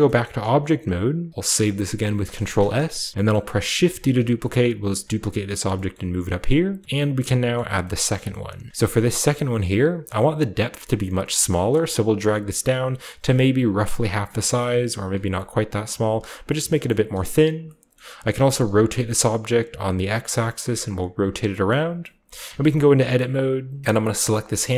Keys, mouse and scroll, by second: 0.2-1.3 middle drag, 1.3 ctrl+s, 2.0 ctrl+s, 2.6 middle click, 2.6-3.7 ctrl+shift+scroll up 1, 3.8 shift+d, 5.1-6.7 drag, 5.9-6.2 shift+middle drag, 6.3-7.4 shift+scroll up 1, 6.8 middle click, 7.5 middle drag, 8.0 shift+middle drag, 8.3-9.5 shift+middle drag, 8.4-9.5 shift+scroll up 1, 10.8-15.0 shift+drag, 15.9-16.4 middle drag, 16.3-17.6 scroll down 5, 16.6 shift+middle click, 16.9-17.6 shift+middle drag, 17.8-18.3 shift+scroll down 1, 17.9-20.8 shift+middle drag, 18.3 typing, 21.1-22.2 drag, 21.7 middle click, 22.2 scroll up 2, 22.3 middle click, 23.2 middle click, 23.8-24.4 scroll up 1, 24.4 scroll up 1, 24.5 scroll down 1.